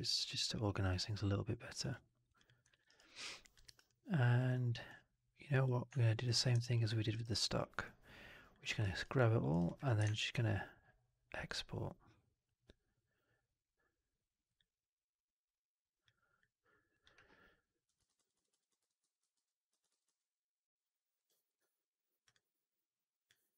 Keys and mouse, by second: 0.2 ctrl+s, 1.8-2.7 drag, 2.7 alt+right click, 3.0-3.4 alt+drag, 3.5 alt+right drag, 3.7-4.3 alt+drag, 6.1 shift+click, 6.5 alt+drag, 6.8 alt+middle drag, 7.0 alt+right drag, 7.2-8.4 alt+drag, 8.5 alt+middle drag, 8.7 alt+right drag, 9.0 alt+drag, 9.4 alt+right drag, 9.5 alt+click, 9.9 shift+Tab.